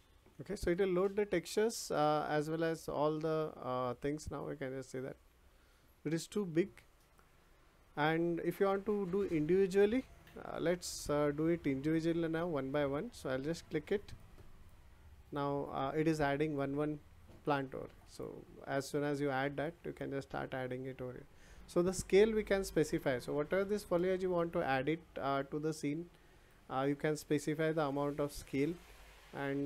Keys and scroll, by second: 9.3 ctrl+z.